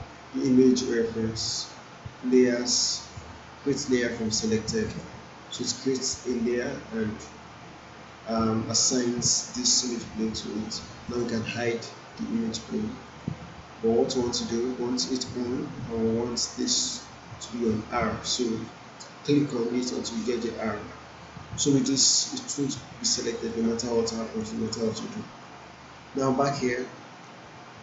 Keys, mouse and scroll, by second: 4.9 click, 11.1 click, 16.3 click, 21.6-22.8 drag, 27.2-27.8 alt+middle drag.